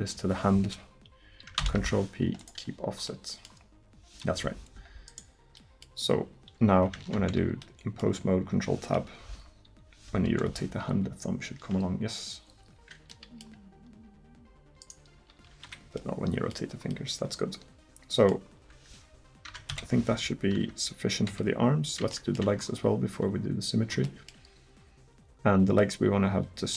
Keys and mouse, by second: 1.6 ctrl+p, 3.3-4.8 middle drag, 7.0 ctrl+Tab, 10.3 KP_1, 10.9 r, 15.2 r, 19.5 Tab, 19.7 KP_1, 20.6 Tab, 21.3 a, 26.3-26.7 middle drag.